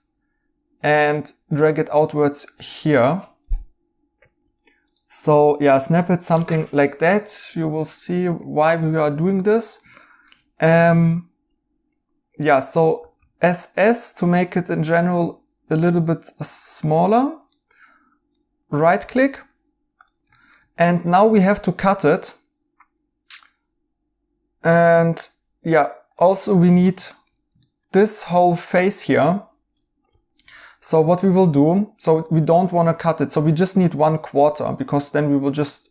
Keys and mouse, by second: 7.3 right click, 9.3 right click, 12.9 s, 13.1 s, 17.5 right click, 26.9 right click, 29.7 2.